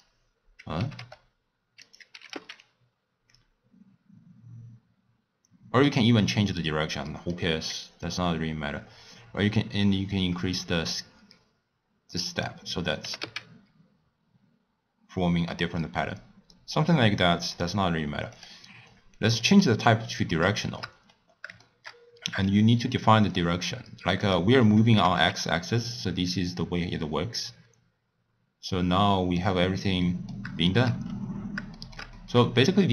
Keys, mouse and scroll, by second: 0.8 g, 2.2 g, 7.1 middle click, 8.1-11.1 drag, 13.1 g, 18.4-20.7 drag, 20.7 shift+middle click, 21.0-21.7 scroll down 5, 21.7-23.4 shift+middle drag, 23.4 click, 24.3 click, 25.0 g, 29.9-31.1 middle drag, 31.1-32.2 scroll up 7, 31.8 shift+middle click, 32.2 middle click, 32.6-32.9 scroll down 3.